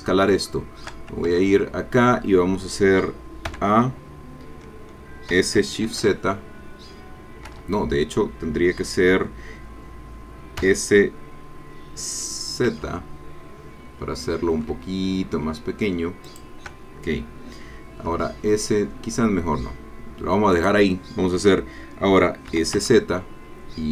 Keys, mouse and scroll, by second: 0.1 scroll down 2, 0.5 shift+click, 1.3 shift+Tab, 3.5 a, 5.3 s, 5.9 shift+z, 7.5 Escape, 10.6 s, 12.7 z, 16.3 shift+click, 18.0 s, 20.5 click, 22.5 s, 22.7 z.